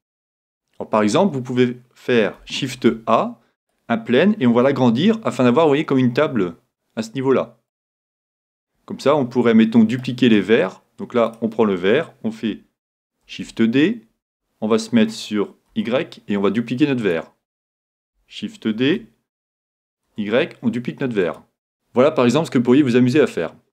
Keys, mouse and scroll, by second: 0.8-2.8 middle drag, 4.7 s, 7.9-9.6 drag, 9.1 middle click, 10.3-11.9 middle drag, 11.3-13.1 right drag, 12.4-13.8 middle drag, 17.1-19.0 drag, 21.4 click, 22.7-23.7 middle drag.